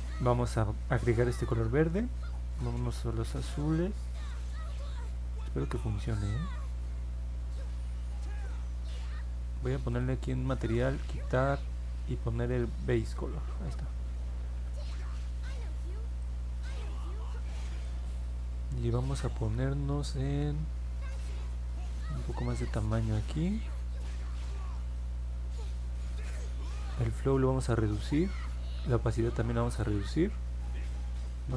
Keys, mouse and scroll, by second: 1.1 click, 3.0-8.8 drag, 9.9 click, 12.5 click, 13.3 middle click, 16.2-17.8 drag, 21.1-22.7 drag, 24.1 middle click, 27.1 click, 28.8-29.9 drag.